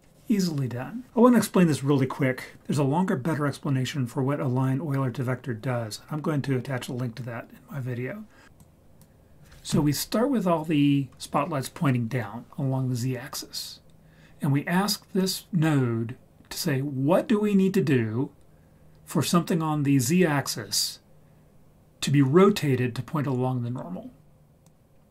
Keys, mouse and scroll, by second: 8.4 ctrl+z, 8.6 ctrl+right click, 15.2 click, 24.6-25.1 drag.